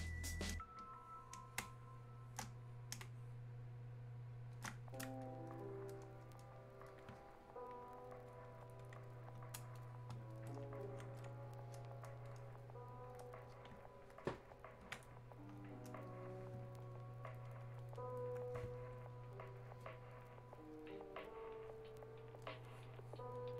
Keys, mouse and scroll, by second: 1.6 ctrl+space, 4.9-12.3 drag, 16.8 click, 22.4-23.5 drag.